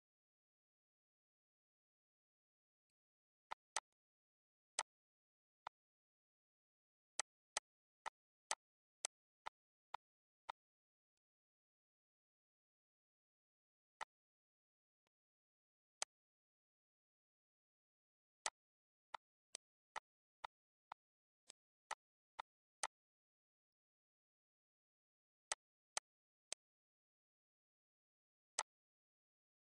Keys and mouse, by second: 2.6 click, 3.3 click, 4.5 click, 5.4 click, 6.8 click, 10.5 click, 13.8 click, 14.8 click, 15.8 click, 18.2 click, 18.9 click, 21.0 shift+click, 23.1 click, 25.1 click, 28.3 click.